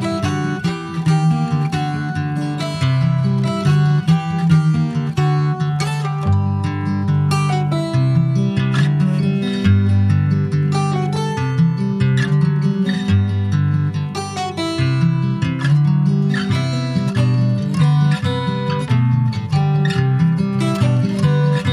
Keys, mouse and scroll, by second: 4.8 middle click, 5.2 2, 5.3 click, 5.8 click, 6.7 alt+shift+click, 7.0 middle click, 7.9 alt+shift+click, 8.3 middle click, 8.6-9.0 scroll up 2, 9.0 s, 11.2 middle click, 11.6 scroll up 1, 11.8 middle click, 12.5 ctrl+b, 17.1 middle click, 17.4 Tab, 17.6 click, 18.1 ctrl+s, 18.3 click, 18.5 Tab, 18.9 middle click, 19.5 3, 19.6 click, 20.2 middle click, 21.0 alt+shift+click, 21.4 alt+shift+click.